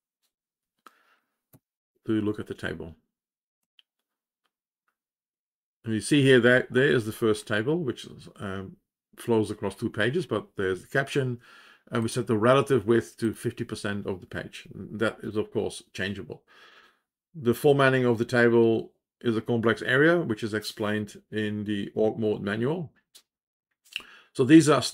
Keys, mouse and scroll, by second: 0.1 Return, 2.6 shift+p, 4.4 Page_Down, 12.0 click.